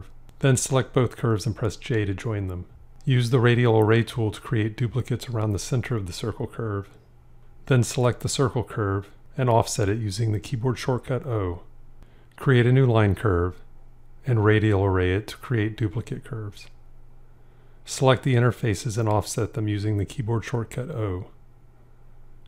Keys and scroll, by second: 2.5 j, 9.0 o, 19.5 o.